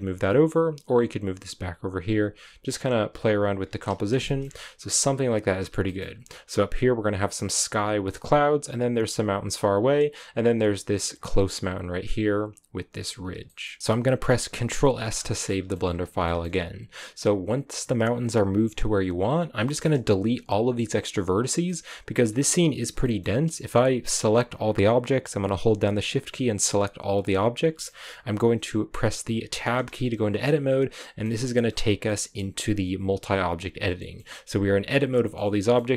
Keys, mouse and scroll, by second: 0.0 g, 3.1 g, 3.8 scroll down 1, 3.8 a, 4.2 shift+middle click, 4.3-5.6 scroll up 2, 5.6 scroll up 1, 5.8-8.6 shift+middle drag, 8.6-11.8 right drag, 11.8-12.3 scroll down 1, 12.3-13.4 scroll up 1, 13.4 shift+middle click, 13.8-14.9 scroll down 2, 14.9-15.4 scroll down 1, 15.4 shift+middle click, 15.8-16.2 scroll up 1, 16.2-19.3 shift+middle drag, 19.3-19.6 scroll down 1, 19.6 shift+middle click, 20.4-21.6 scroll down 1, 21.6 middle click, 22.2-22.8 scroll down 3, 22.8 scroll down 2, 22.9 middle click, 23.7-27.5 right drag, 27.5 scroll down 1, 27.8-29.8 middle drag, 29.8 Tab, 30.9 middle click, 31.2-31.6 scroll up 7, 32.0-33.4 middle drag, 33.4 a, 33.7 scroll down 1, 33.9 middle click, 34.3 a, 35.0 a, 35.3-35.9 middle drag.